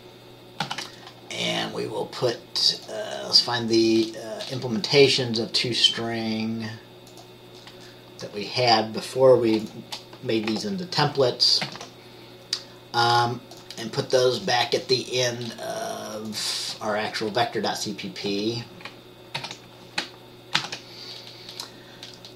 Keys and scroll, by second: 0.7 ctrl+s, 11.8 ctrl+c, 18.4 Return, 19.5 ctrl+v, 20.7 ctrl+s.